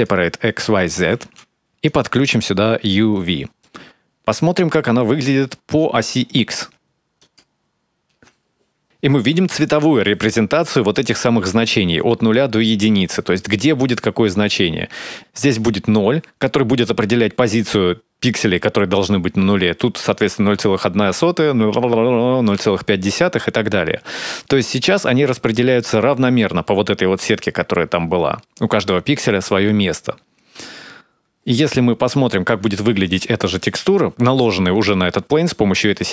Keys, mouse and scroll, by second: 2.8 click, 3.6-4.1 scroll up 4, 4.1 middle click, 8.2 ctrl+shift+click, 32.3 middle click.